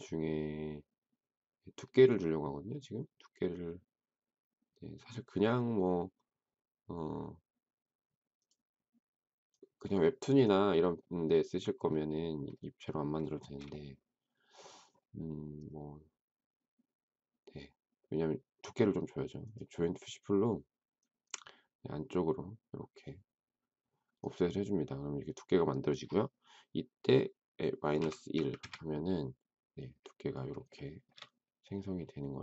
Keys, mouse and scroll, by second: 13.3 shift+middle click, 27.6-28.6 typing, 30.6 shift+scroll up 1, 30.7 shift+middle click, 31.1 shift+scroll down 1.